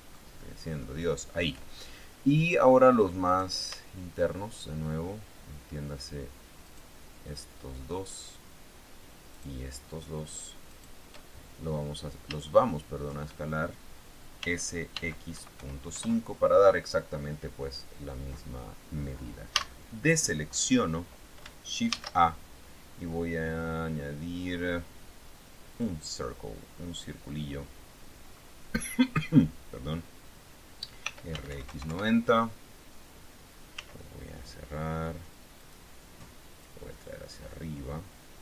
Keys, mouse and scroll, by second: 1.2 shift+middle click, 3.6 right click, 7.0 shift+right click, 7.7 shift+middle click, 9.7 shift+right click, 11.0 shift+right click, 11.6 shift+scroll down 2, 12.4 scroll down 3, 12.8 shift+click, 14.8 s, 15.3 x, 15.7 KP_Decimal, 15.9 KP_5, 16.3 KP_Enter, 17.2-17.6 scroll down 2, 19.9 a, 20.4-20.9 scroll up 2, 20.9 scroll down 2, 22.2 shift+a, 26.1 click, 27.1-27.4 scroll down 1, 27.8-28.1 scroll down 1, 28.8 scroll up 1, 29.4 scroll down 1, 31.4 r, 31.6 x, 31.8 KP_9, 32.0 KP_0, 32.2 KP_Enter, 34.1 s, 36.0 click, 37.0-38.4 drag.